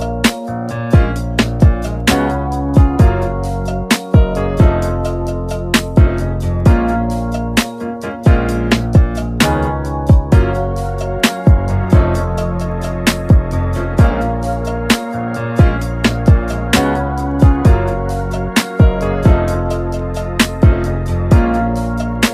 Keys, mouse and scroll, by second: 0.5-0.8 scroll down 3, 1.7-4.5 drag, 4.5-4.8 scroll down 3, 5.0-5.3 middle drag, 5.3 scroll up 1, 5.9-6.7 middle drag, 6.7-13.8 drag, 13.8-14.3 shift+middle drag, 14.3-15.2 drag, 15.2 KP_1, 19.2-20.9 scroll up 1.